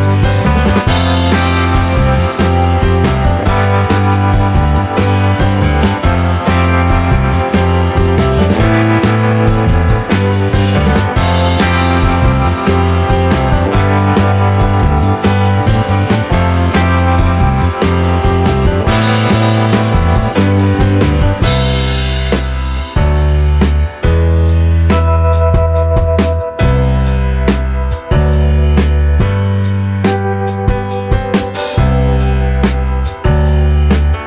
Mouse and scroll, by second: 0.4 middle click, 1.5-3.9 drag, 4.6 middle click, 7.7 click, 11.4 click.